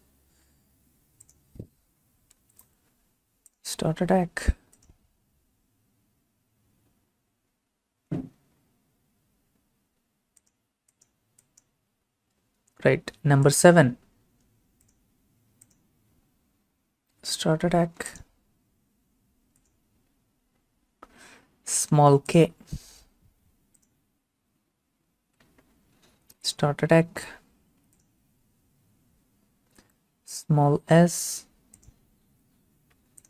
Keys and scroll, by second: 2.4 u, 17.1 7, 25.3 k, 32.3 s.